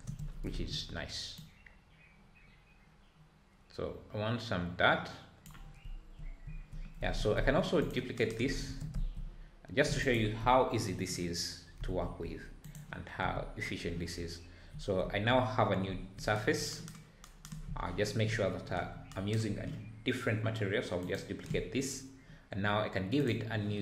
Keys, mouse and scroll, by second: 0.0 ctrl+space, 1.6-4.4 drag, 5.8 `, 6.4 `, 7.1 scroll down 4, 7.3 `, 7.8 click, 8.6 shift+d, 10.4 KP_Decimal, 11.8 g, 13.2 n, 14.8 scroll down 2, 15.5 scroll up 2, 21.1-23.5 drag.